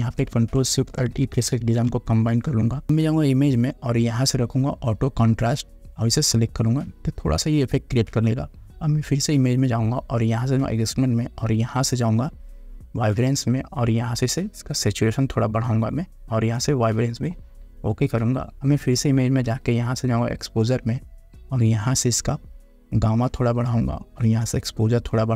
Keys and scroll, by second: 1.7 ctrl+alt+shift+e.